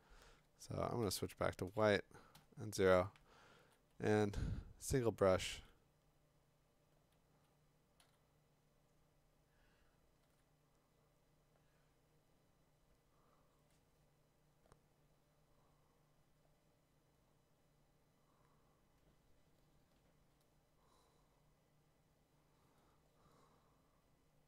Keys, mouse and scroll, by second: 1.0 x, 2.3 0, 2.8-3.7 [, 8.0 x, 10.2 x.